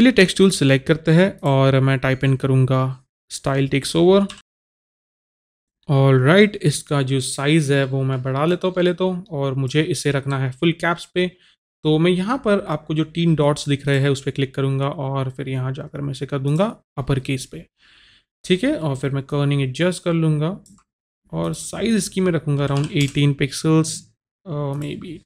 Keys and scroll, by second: 4.5-5.8 typing, 22.6 KP_1, 22.8 KP_8, 23.0 Return.